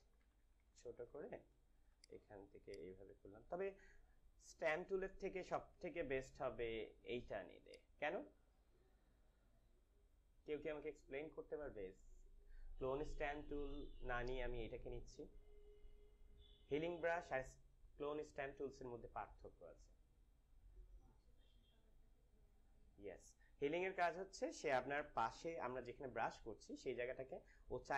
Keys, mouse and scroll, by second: 0.0-1.1 typing, 1.9-6.2 alt+drag, 5.6 ctrl+alt+z, 6.2 ctrl+alt+z, 7.5-11.8 drag.